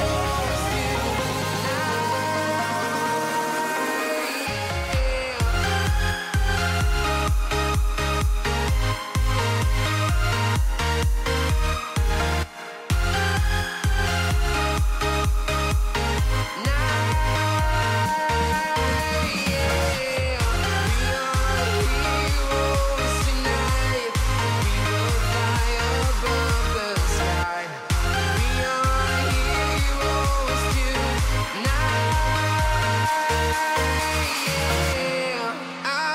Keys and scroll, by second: 1.9 /, 8.1 alt+Tab, 13.9 alt+Tab, 14.3 space, 15.2 ctrl+v, 24.6 shift+e, 25.9 m, 26.1 a, 26.2 i, 26.8 l, 32.1 ctrl+z, 36.0 alt+Tab.